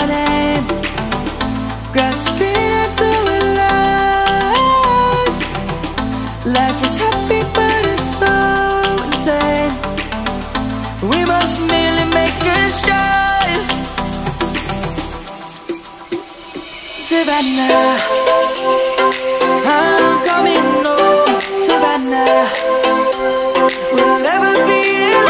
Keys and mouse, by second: 0.4 s, 1.6 right click, 2.1 s, 3.9 click, 4.4 middle click, 10.2 ctrl+a, 10.9 click, 11.6 Tab, 14.6 click, 17.8 click, 19.5 middle click, 20.9 shift+click, 23.3 shift+click, 24.2 shift+click.